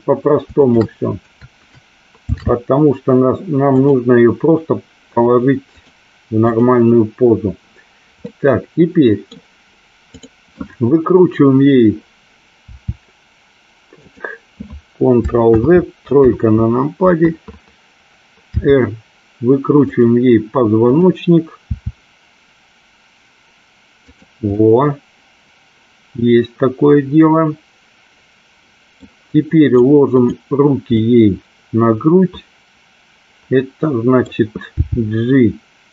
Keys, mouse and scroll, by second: 0.7 shift+click, 2.3 ctrl+shift+c, 6.4 click, 8.3 middle click, 10.2 click, 12.7 r, 15.6 ctrl+z, 16.2 KP_3, 18.6 r, 19.9 click, 20.9 click, 21.6 r, 24.2 click, 24.6-29.1 middle drag, 29.8 click, 31.0-34.5 middle drag, 35.0 g.